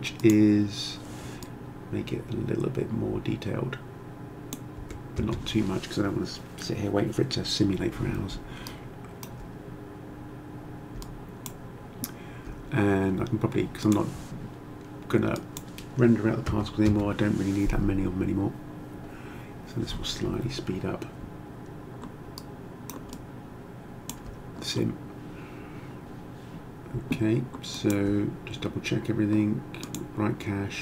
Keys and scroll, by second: 4.8 1, 5.2 Return, 16.5 8, 16.9 Return.